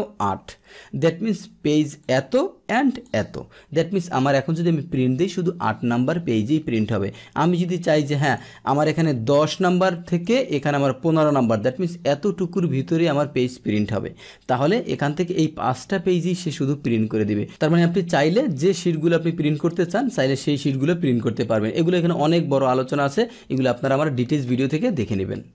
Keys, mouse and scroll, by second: 2.0 click, 2.9 click, 7.8 click, 10.2 click, 14.9 click.